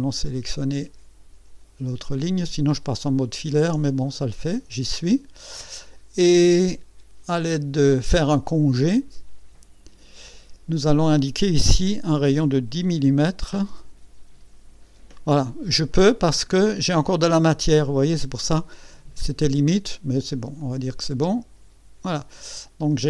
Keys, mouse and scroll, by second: 3.1 ctrl+click, 3.9-5.7 ctrl+drag, 8.5 click, 12.9 KP_1, 15.9 click, 17.9 click, 20.6 click, 22.1-23.0 drag.